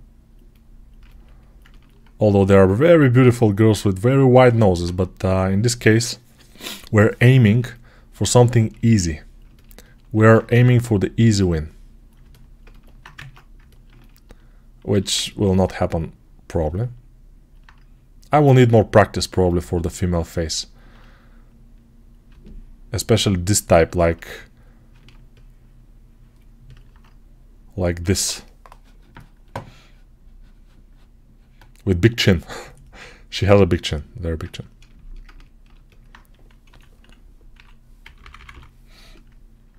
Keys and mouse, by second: 9.0-12.2 ctrl+alt+right drag, 10.0 alt+q, 10.3 Tab, 12.2-15.0 drag, 13.0 ctrl+Tab, 14.8 alt+q, 22.1-34.3 alt+right drag, 36.5 3, 37.9 [, 38.1 [.